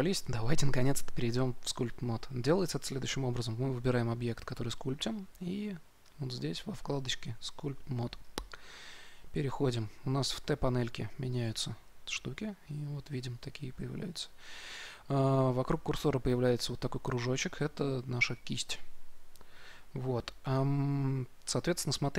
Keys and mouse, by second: 5.9 right click, 11.3-22.1 drag.